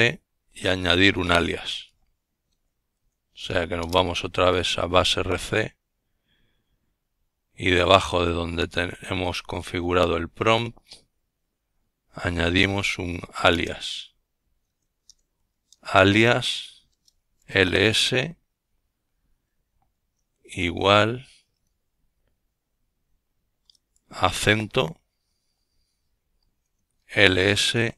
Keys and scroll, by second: 1.9 typing, 7.6-12.2 typing, 14.1-18.1 typing, 20.8 typing, 24.5 Escape, 26.0-26.9 typing, 27.3 Return.